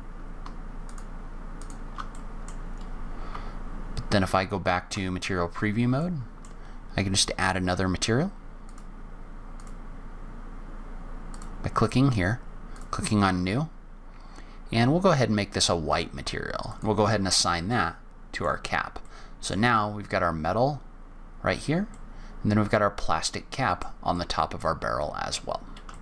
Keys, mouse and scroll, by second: 0.8 shift+click, 1.6 shift+click, 2.1 middle click, 2.5-3.3 scroll down 3, 3.3-4.6 scroll down 2, 3.3 z, 5.4-6.0 scroll up 3, 6.0 middle click, 8.6 click, 11.3 click, 12.7 click, 16.6 click, 17.3 click, 17.6 middle click, 18.5-19.0 scroll down 2, 19.0 middle click, 19.8-20.3 scroll down 2, 20.3-21.1 scroll up 2, 21.1-21.5 scroll up 1, 21.6 scroll down 1, 21.8 middle click, 24.1 middle click, 25.0-25.3 scroll up 1, 25.3-25.8 scroll down 1, 25.9 shift+middle click.